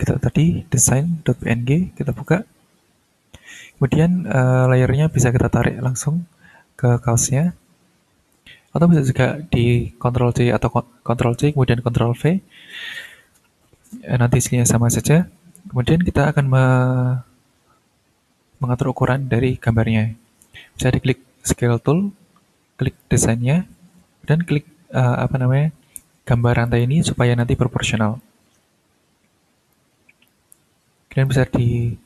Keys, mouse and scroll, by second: 0.8 click, 2.1 click, 5.6-7.6 drag, 9.5 click, 12.7 click, 15.1 click, 19.0 click, 22.8 click, 26.7 click, 28.2-29.9 drag, 30.2 click.